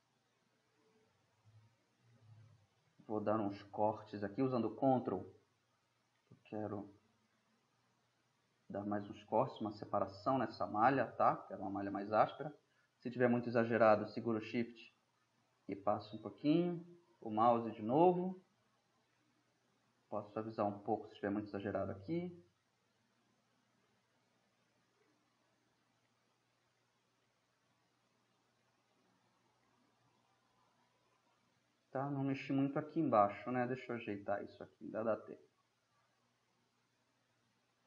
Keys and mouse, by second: 1.2-2.5 middle drag, 2.5 drag, 2.7 middle drag, 3.7-4.5 middle drag, 6.2-7.8 middle drag, 9.2-10.5 middle drag, 10.7-13.2 middle drag, 13.2 click, 13.7 ], 18.0 click, 18.3-19.5 middle drag, 20.0-23.8 drag, 24.6-25.5 middle drag, 26.7-28.9 middle drag, 34.4 drag, 34.6-36.3 middle drag, 36.9-37.8 drag.